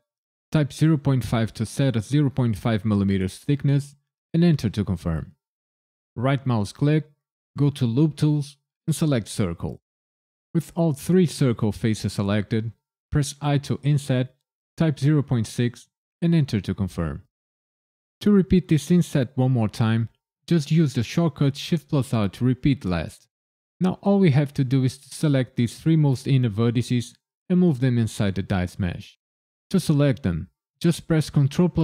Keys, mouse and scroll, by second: 0.8 KP_Decimal, 1.3 KP_5, 4.3 KP_Enter, 6.1 right click, 13.4 i, 14.9 KP_Decimal, 15.4 KP_6, 16.2 KP_Enter, 21.5 shift+r, 31.3 ctrl+KP_Subtract.